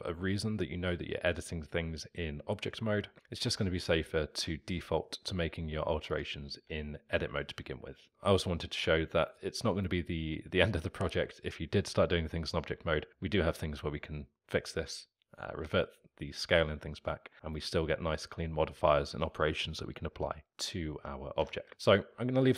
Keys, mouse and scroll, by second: 3.9-6.2 alt+middle drag, 6.2 click, 6.6 Tab, 8.1-9.3 alt+middle drag, 9.3 click, 21.4 a, 21.7 x.